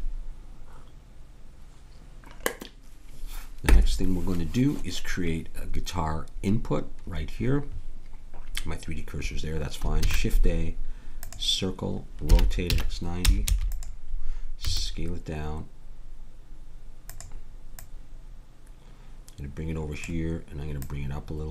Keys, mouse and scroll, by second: 10.0 shift+a, 12.2 r, 14.7 s, 17.7-20.0 drag, 20.8-21.5 drag.